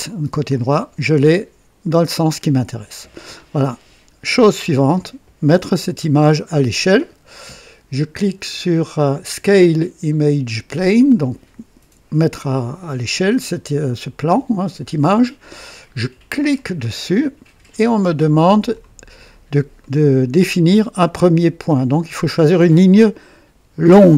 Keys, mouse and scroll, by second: 0.0 click, 1.2 scroll up 2, 2.3-3.2 right drag, 5.5-5.8 scroll up 2, 6.4 right click, 16.5 click, 18.0-18.8 drag, 19.0-19.8 scroll up 2, 19.8 right click, 20.8 scroll up 2, 21.2 right click.